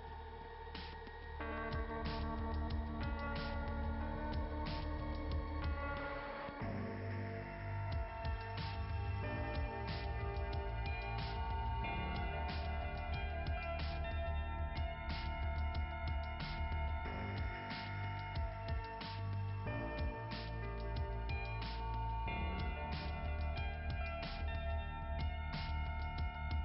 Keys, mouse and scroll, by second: 1.1 ], 3.0 ], 3.6 ], 4.4 click, 4.6 ], 4.7 click, 7.2 click, 7.8 click, 9.3 click, 9.6 click, 10.6 click, 15.6 click, 16.8 click, 18.4 click, 20.1 click, 21.3 click, 22.1 scroll up 2, 22.3-22.7 scroll down 2, 25.2 click, 26.1 click.